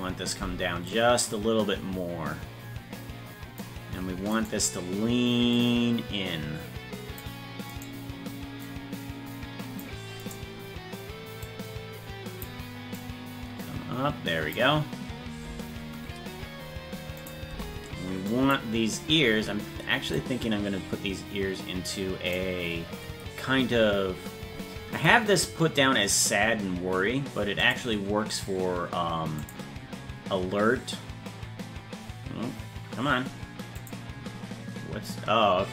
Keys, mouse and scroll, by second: 0.9-3.6 drag, 4.5 right click, 5.6-7.2 drag, 7.8 right click, 8.7-9.8 drag, 10.3-11.4 right drag, 11.4-12.5 drag, 13.0-14.6 drag, 17.4 right click, 17.5 c.